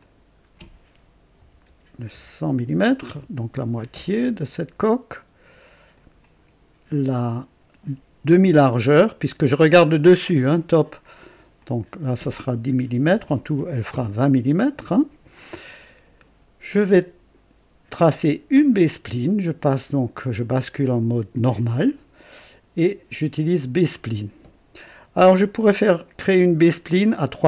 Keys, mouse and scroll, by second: 1.4 KP_1, 1.6 KP_0, 3.0 Return, 5.9 click, 11.5 click, 13.0-14.1 typing, 13.9 KP_Enter, 21.3 click, 23.5 click, 26.5 click.